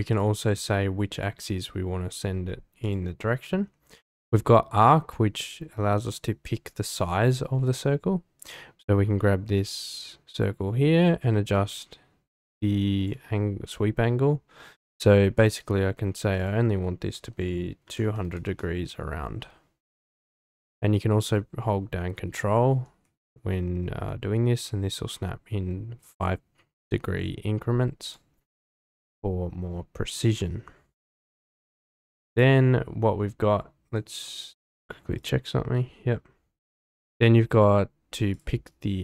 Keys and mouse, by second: 0.6-13.1 drag, 16.4-18.9 drag, 18.2 KP_0, 21.4-28.1 ctrl+drag, 33.8 click, 35.2-39.0 drag.